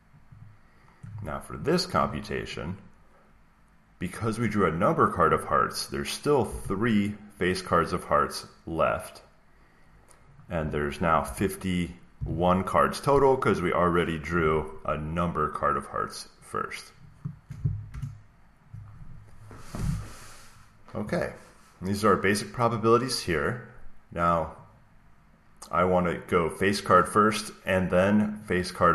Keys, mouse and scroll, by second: 0.3 click, 1.9 =, 2.3 click, 6.4 typing, 10.5-12.1 typing, 17.8 Return, 25.8 click, 28.3 click.